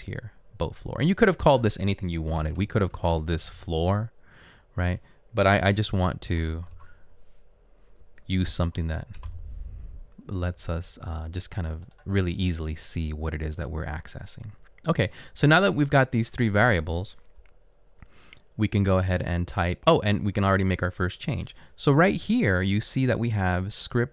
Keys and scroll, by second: 2.5 BackSpace, 2.6 BackSpace, 3.0 BackSpace, 3.6 f, 5.6 Left, 6.2-9.4 typing, 8.0 Right, 18.7 Down, 20.2 Down.